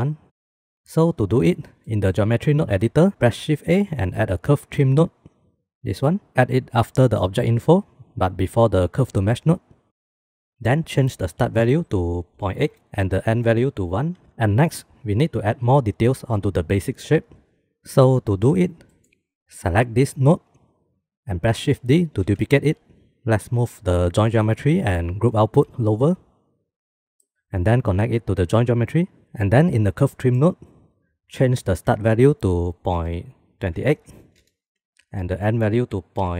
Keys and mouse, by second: 1.7 middle click, 3.1 shift+a, 11.4-14.3 drag, 18.9 click, 19.8-20.3 drag, 22.2 shift+d, 23.2-23.8 drag, 25.2 g, 26.1 click, 26.3 middle drag, 27.1 middle click, 27.3 ctrl+z, 27.9-28.9 middle drag, 30.3 middle click, 31.9-34.5 drag, 35.2-36.3 drag.